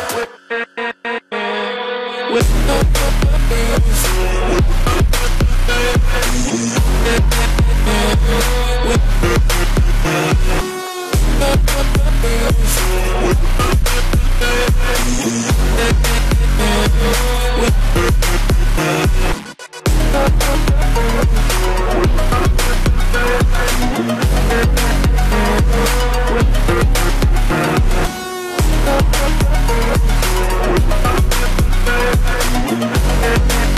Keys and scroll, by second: 19.9 ctrl+z, 24.7 ctrl+z.